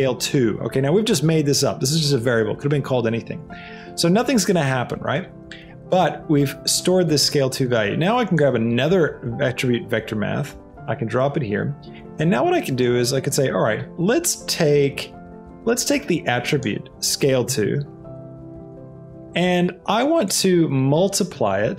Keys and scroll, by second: 0.0 2, 1.1 Return, 8.8 shift+d, 17.6 a, 18.0 e, 18.3 2, 18.7 Return.